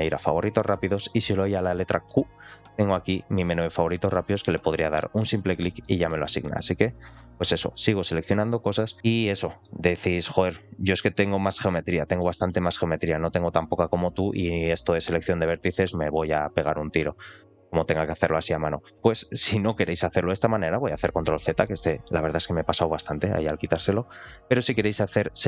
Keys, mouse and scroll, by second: 5.7 middle click, 6.7 ctrl+click, 7.7 ctrl+shift+click, 8.0 ctrl+shift+click, 8.9 ctrl+shift+click, 9.2 ctrl+shift+click, 9.5 middle click, 10.9 ctrl+shift+click, 11.5 ctrl+shift+click, 11.7 middle click, 13.0 ctrl+shift+click, 13.5 ctrl+shift+click, 13.8 middle click, 14.6 ctrl+shift+click, 15.9 q, 20.2 ctrl+z, 21.5 middle click, 25.1 middle click.